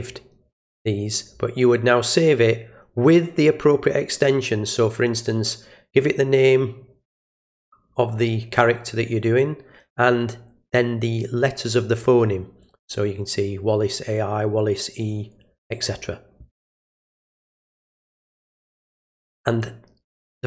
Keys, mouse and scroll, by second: 17.1 click.